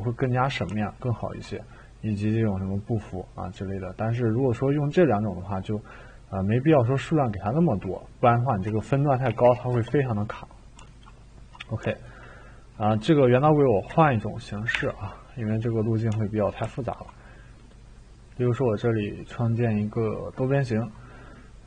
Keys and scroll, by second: 8.6-9.4 typing, 9.7 Return, 13.8 Delete, 14.7 Delete, 14.7-15.5 typing.